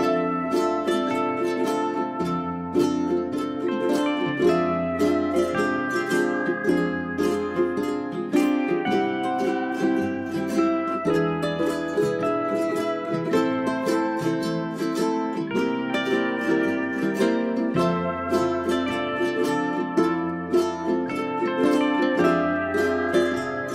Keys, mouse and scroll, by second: 1.8 right click, 2.4 click, 2.9 right click, 3.5 shift+click, 5.2 click, 6.1 Delete, 6.3-7.8 drag, 9.0 right click, 9.4 click.